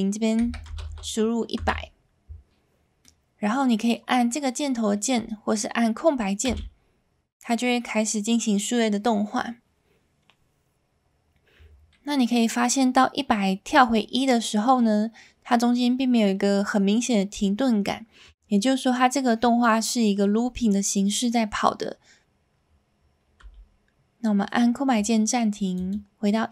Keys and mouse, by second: 0.9 KP_0, 3.1 middle click, 6.4 space, 23.4 space, 25.7 click.